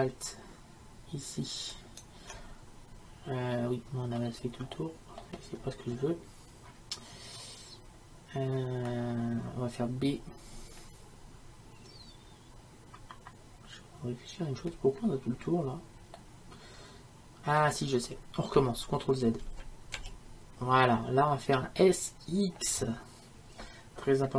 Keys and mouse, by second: 1.8-4.2 right drag, 4.2-18.0 middle drag, 19.5 ctrl+z, 20.0 ctrl+z.